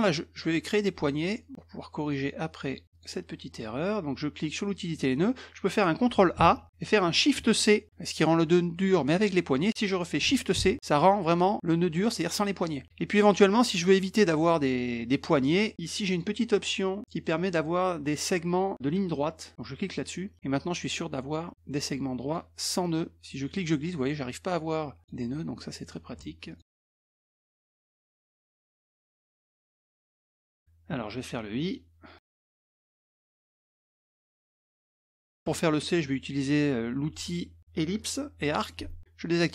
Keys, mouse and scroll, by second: 2.0 click, 2.9 click, 4.7 click, 6.4 ctrl+a, 10.5 shift+c, 16.1 click, 19.8 click, 22.2 click, 23.5-25.0 drag, 26.5 ctrl+click, 27.2 middle click, 27.7 middle click, 28.3 middle click, 28.8 middle click, 29.2 middle click, 29.5 middle click, 30.2 middle click, 31.6 click, 34.8 click, 35.5 middle click, 38.0 click, 38.4 middle click.